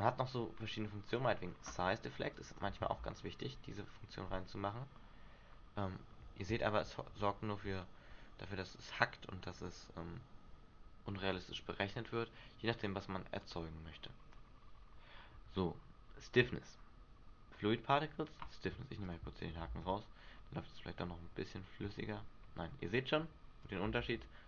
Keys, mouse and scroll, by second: 1.3 click, 2.5 click, 3.0 alt+a, 11.4 Escape, 13.6 click, 19.2 click, 19.8 alt+a, 22.8 Escape, 23.8 click, 24.1 alt+a.